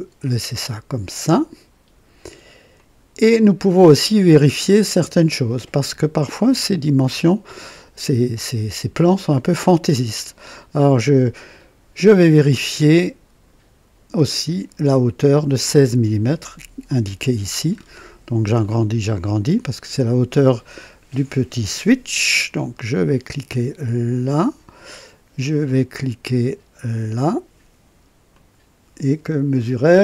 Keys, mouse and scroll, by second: 2.7 click, 4.1 scroll down 2, 4.7 right click, 14.1 click, 17.8-18.2 scroll up 2, 18.6-19.9 right drag, 24.3 click, 28.3 click.